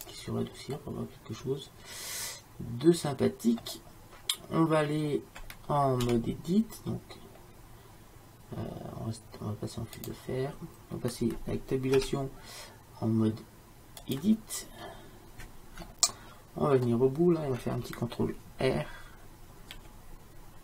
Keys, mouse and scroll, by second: 0.0 click, 1.0 click, 1.2 click, 1.4 click, 1.7-2.9 middle drag, 6.1 z, 12.0 Tab, 14.9 middle click, 19.8 ctrl+r.